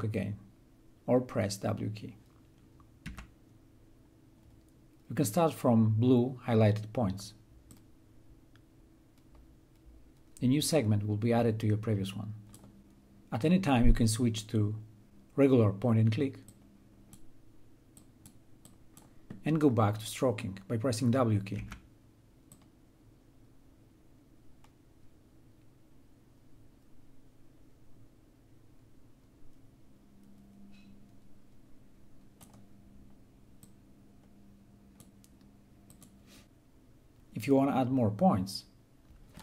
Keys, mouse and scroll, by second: 2.6 w, 7.3-12.7 drag, 16.1-20.5 drag, 21.1 w, 22.1-36.4 drag.